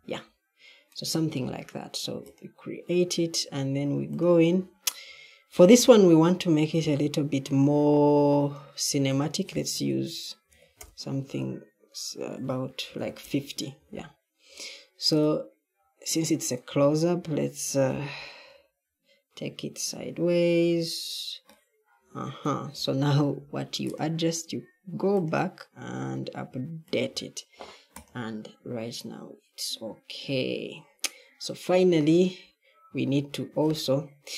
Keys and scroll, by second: 10.1-10.9 typing, 12.5-13.4 typing, 18.3 Left, 20.4 Down.